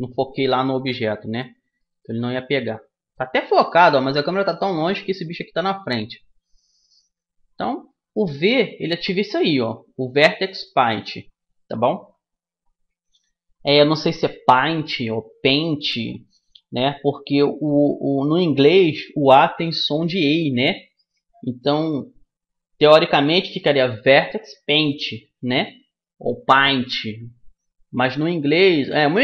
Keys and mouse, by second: 0.0 Escape, 1.5-3.6 middle drag, 4.5-10.5 middle drag.